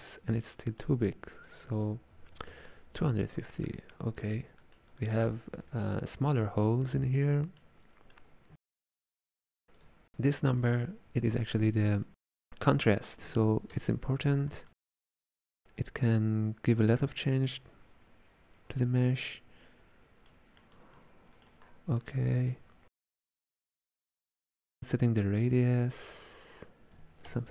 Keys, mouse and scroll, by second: 1.5-3.6 drag, 3.6-9.8 ctrl+middle drag, 9.8 click, 14.7-17.8 middle drag, 20.6-21.7 middle drag, 21.7-22.0 scroll down 2, 22.0-23.7 middle drag, 23.7-24.3 scroll up 5, 24.3-27.5 drag.